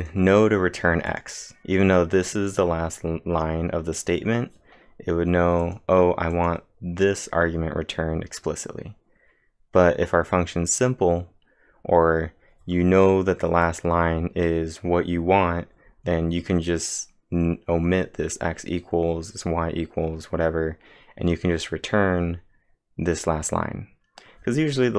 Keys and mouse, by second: 0.0 click, 1.1 click, 5.4-6.1 typing, 5.6-8.7 click.